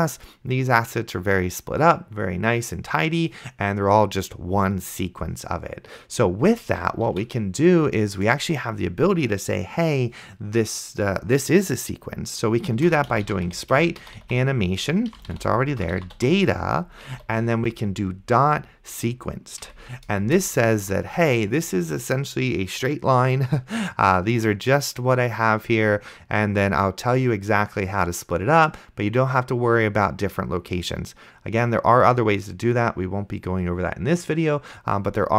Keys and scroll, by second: 7.4 ctrl+w, 12.8-16.0 typing, 17.2 ., 19.7 Down, 20.2 Return.